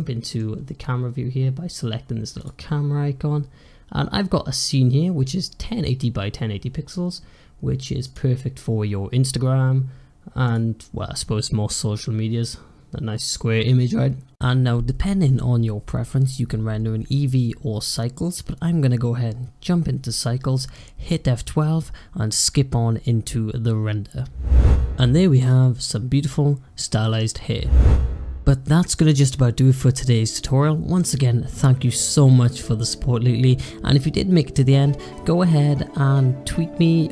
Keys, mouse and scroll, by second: 0.5 scroll up 1, 2.3 drag, 3.0 scroll down 1, 3.2-4.5 scroll up 3, 4.5-6.7 scroll up 1, 8.0 click, 8.5 scroll up 1, 8.8-9.8 scroll down 1, 10.3 click, 12.3-13.6 scroll down 1, 13.6-14.8 scroll up 1, 14.8 scroll down 1, 15.0-16.0 scroll up 2, 16.0-17.3 scroll down 1, 17.3 click, 23.0-24.5 drag.